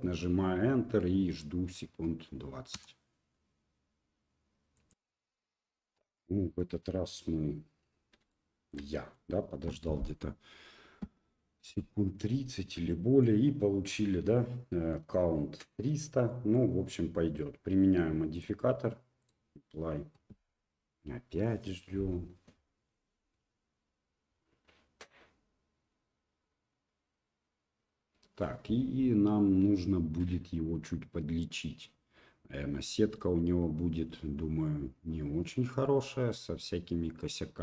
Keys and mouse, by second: 6.6-7.1 middle drag, 8.3-8.7 shift+middle drag, 8.9 middle click, 12.9-13.2 middle drag, 16.3 middle click, 18.4-37.6 drag.